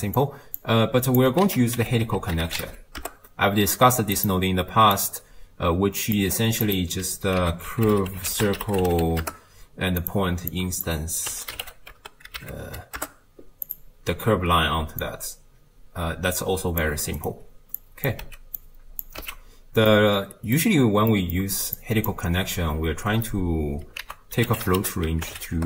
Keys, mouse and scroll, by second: 0.2 click, 1.1-3.0 drag, 3.0 ctrl+a, 5.0 click, 6.7-9.2 drag, 9.2 ctrl+a, 10.5-10.9 drag, 15.0-16.8 drag, 17.8 click, 18.3 x, 18.6-19.0 drag, 19.2 x, 20.0-21.8 middle drag, 21.8-25.5 drag, 25.5 ctrl+a.